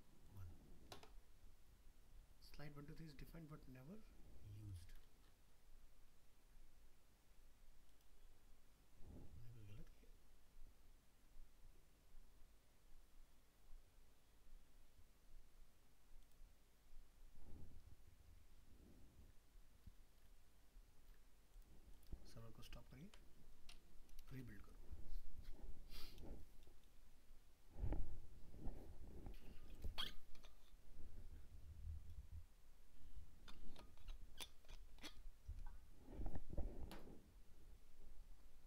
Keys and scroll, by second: 22.8 ctrl+c.